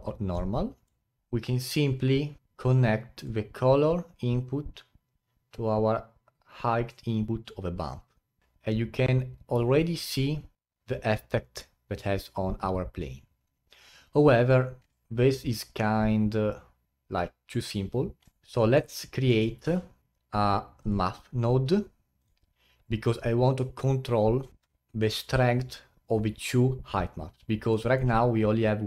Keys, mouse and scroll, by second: 0.3-8.4 middle drag, 9.7 alt+click, 10.4 scroll up 2, 10.6 alt+click, 14.8-17.0 middle drag, 18.3-19.6 middle drag, 19.6 shift+a, 27.7 middle click, 28.2-28.8 scroll up 3.